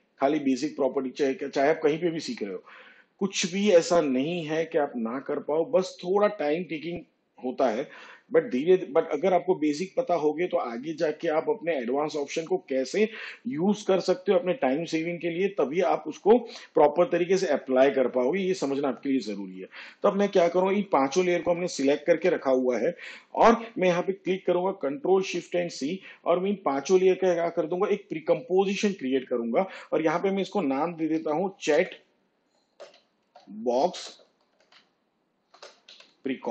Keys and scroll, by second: 24.3 s, 27.1 ctrl+shift+c, 33.0-36.5 typing.